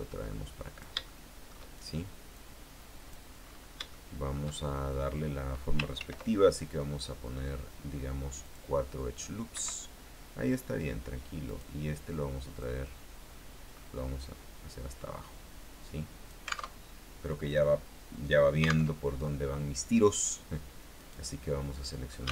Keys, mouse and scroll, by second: 1.2 shift+middle click, 2.5-3.6 drag, 3.6-3.9 scroll up 3, 4.1 shift+middle click, 6.1 ctrl+r, 7.1-8.1 scroll up 6, 8.6 click, 9.7 Escape, 11.6 right click, 12.7-16.9 drag, 16.9 alt+Tab, 21.1 right click.